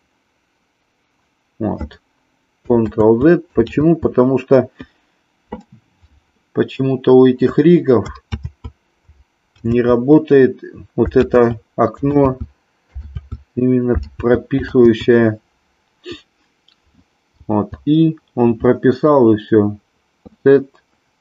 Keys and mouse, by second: 3.1 ctrl+z, 3.8 ctrl+z, 8.6 ctrl+z, 9.8 ctrl+z, 11.3 ctrl+z, 12.3 ctrl+z, 13.2 ctrl+z, 14.9 ctrl+z.